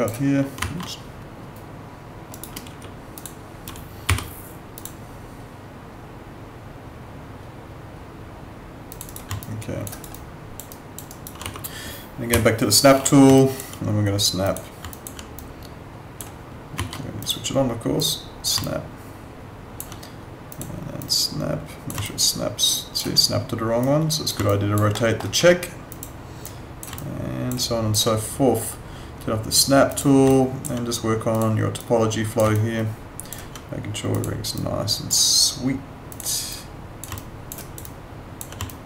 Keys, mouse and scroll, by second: 0.6 ctrl+z, 2.3 right click, 2.7 w, 3.1 click, 4.1 y, 4.8 click, 8.9 click, 9.1 right click, 9.4 alt+click, 9.9 alt+right click, 10.1 alt+click, 11.1 alt+right click, 11.4 w, 12.3 F9, 13.3 alt+click, 14.9 alt+click, 17.2 click, 18.6 alt+click, 22.0 alt+click, 24.5 alt+click, 24.9 alt+middle click, 27.6 alt+click, 30.3 alt+click, 32.5 alt+click, 37.1 alt+click, 37.6 alt+right click, 37.8 alt+click, 38.7 alt+click.